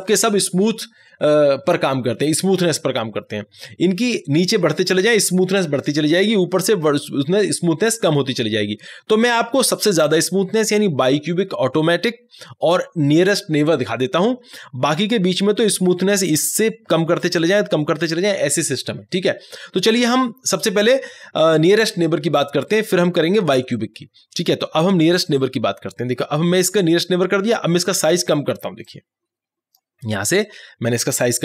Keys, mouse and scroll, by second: 25.3 click, 25.3 click, 28.9 click, 28.9-31.4 drag.